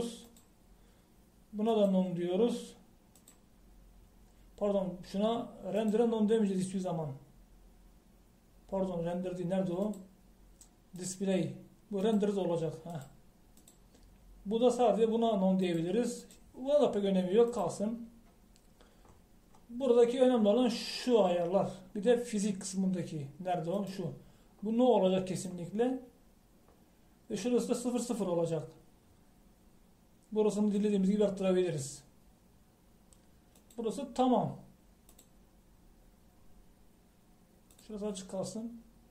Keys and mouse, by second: 38.8-39.1 drag.